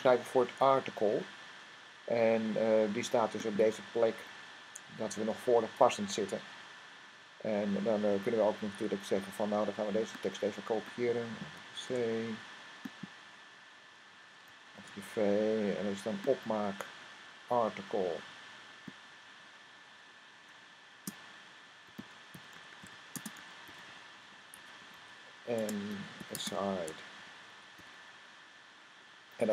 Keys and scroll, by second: 7.4 Up, 11.7 c, 14.2 typing, 21.4-26.7 typing, 28.1-28.8 typing.